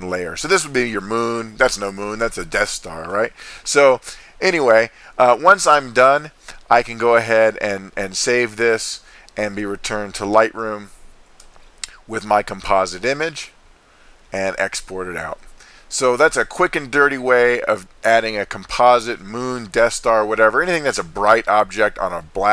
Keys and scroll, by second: 11.4 super+s.